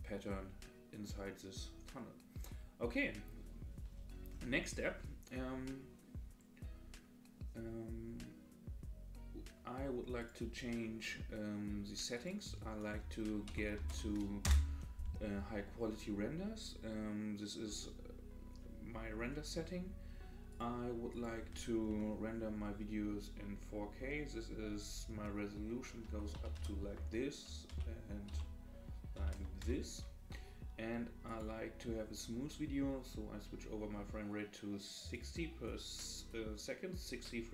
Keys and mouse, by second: 10.2 click, 12.3-15.0 drag, 21.2-30.4 drag, 31.3-35.4 drag.